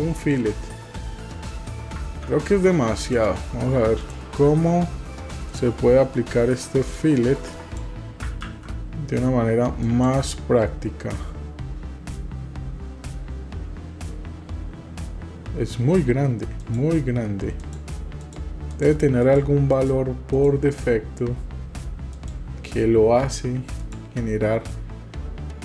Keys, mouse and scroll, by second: 2.2 ctrl+z, 3.1 click, 4.0 click, 5.5-7.8 drag, 8.5 ctrl+z, 9.9 click, 16.7 click, 17.7 click, 18.3 click, 18.7 drag, 19.2 click, 19.7 click, 20.3 click, 22.1 click, 23.9 click.